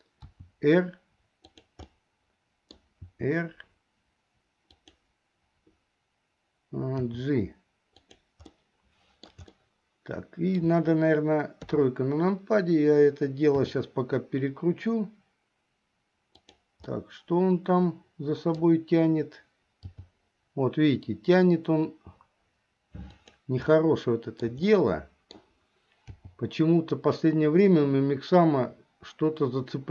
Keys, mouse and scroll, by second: 0.5 r, 2.1 middle click, 3.2 r, 7.2 g, 8.6 middle click, 9.7-10.8 shift+middle drag, 11.7 KP_3, 13.7 r, 17.0-18.7 middle drag, 20.1 g, 23.8 shift+middle click, 24.8 scroll up 1, 25.0 middle click, 25.6 scroll down 1, 26.3 g.